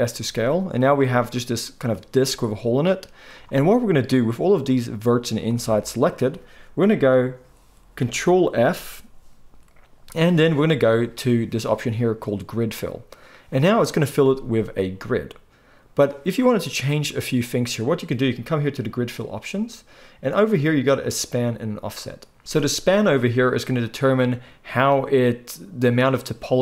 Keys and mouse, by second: 0.9-22.4 middle drag, 8.5 ctrl+f, 22.4-26.6 drag.